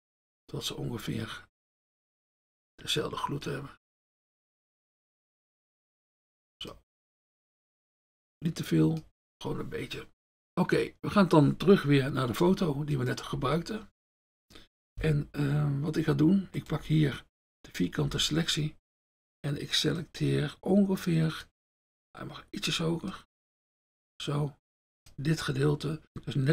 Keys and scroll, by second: 16.8 F1, 18.1 F1.